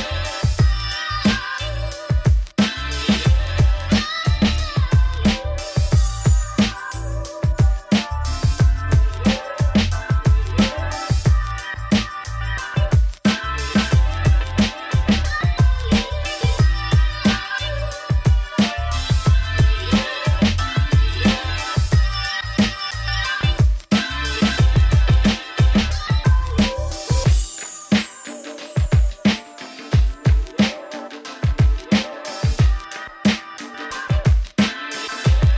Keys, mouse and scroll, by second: 0.0 Tab, 0.2 ctrl+2, 0.8 middle click, 1.0 right click, 1.3 middle click, 1.7 Tab, 1.9 Tab, 2.0 middle click, 2.2 Tab, 2.4 ctrl+r, 3.5 F2, 4.2 3, 4.2 click, 4.4 ctrl+click, 4.7 click, 4.9 shift+click, 5.0 shift+click, 5.2 shift+click, 5.3 middle click, 5.6 shift+click, 5.7 middle click, 6.2 g, 7.0 Tab, 7.1-8.3 middle drag, 8.3 Tab, 8.5 middle click, 9.1 3, 9.2 click, 9.3 middle click, 9.5 g, 11.2 shift+click, 11.5 g, 12.2 shift+click, 12.4 shift+click, 12.6 shift+click, 13.0 g, 13.7 Tab, 13.8 scroll down 4, 14.1 middle click, 15.0 scroll up 2, 16.1 middle click, 16.7 click, 17.0-18.9 shift+middle drag, 19.5 click, 19.7 shift+d, 20.3-21.5 drag, 22.2 Tab, 22.3 a, 24.6 Tab, 24.8 ctrl+2, 25.3 middle click, 26.0 right click, 26.9 middle click, 27.3 click, 27.6-27.9 scroll up 1, 28.3-29.5 middle drag, 30.7-31.1 scroll up 1, 31.1-31.6 scroll down 1, 31.6-32.8 middle drag, 33.0 click, 33.2-33.8 scroll down 6, 33.3 middle click, 33.8-34.6 scroll up 6, 34.6 click, 34.9 Tab.